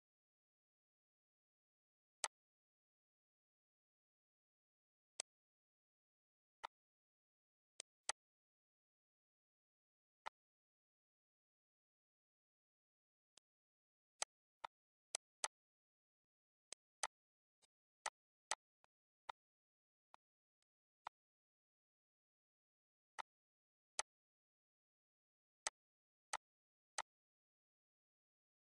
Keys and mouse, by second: 1.9 click, 4.9 click, 6.4 click, 7.5 click, 9.2 ctrl+d, 10.0 ctrl+shift+click, 13.1 click, 13.9 shift+click, 16.0 click, 16.8 shift+click, 17.4 shift+click, 19.6 shift+click, 22.9 click, 23.6 click, 25.4 click, 26.1 click, 26.7 click.